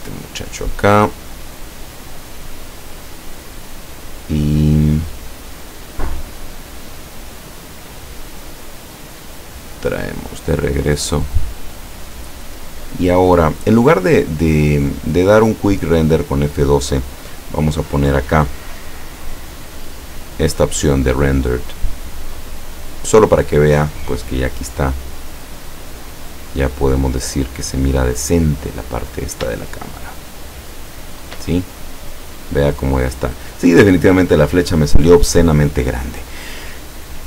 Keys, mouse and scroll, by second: 0.4 middle click, 1.4 scroll up 2, 2.0-3.3 middle drag, 3.3 scroll up 2, 3.5 middle click, 7.5 click, 9.9 click, 10.8-11.2 scroll down 1, 11.2 middle click, 14.9 click, 18.1 click, 21.4 click, 25.4-26.9 middle drag, 27.2-27.9 scroll up 2, 28.4 middle click, 29.6 shift+middle click, 29.9-31.1 shift+middle drag.